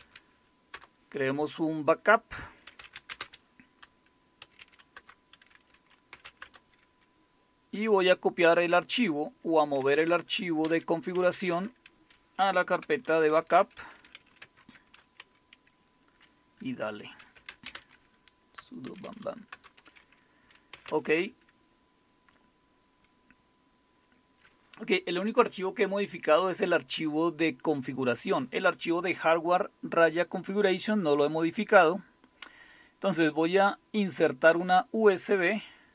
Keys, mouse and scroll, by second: 0.0-0.7 typing, 2.4-6.8 typing, 9.6-14.9 typing, 17.0-19.1 typing, 19.5 Return, 20.5-21.2 typing, 31.6 click.